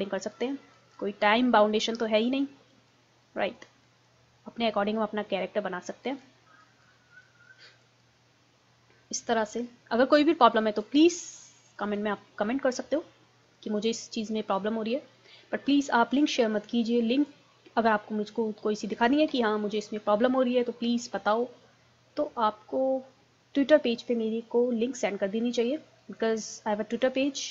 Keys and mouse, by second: 5.3 middle click, 5.9-9.5 drag, 9.7 click, 12.5-14.3 middle drag, 14.3-16.7 drag, 16.7-18.5 middle drag, 19.3 KP_1, 24.4-27.5 middle drag.